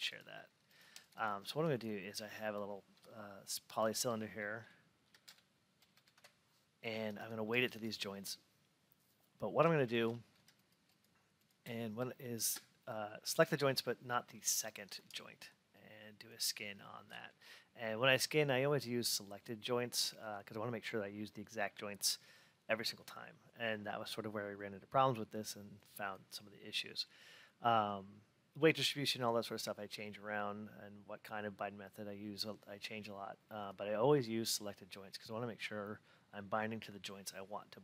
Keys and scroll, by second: 6.1 Return.